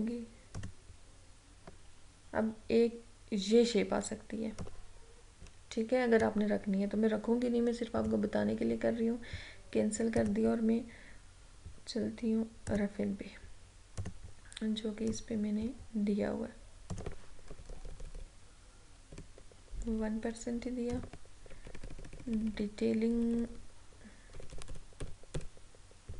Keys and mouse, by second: 0.7 click, 4.7-8.1 drag, 12.8-17.0 drag, 17.6 Down, 21.0 click, 21.7 Up.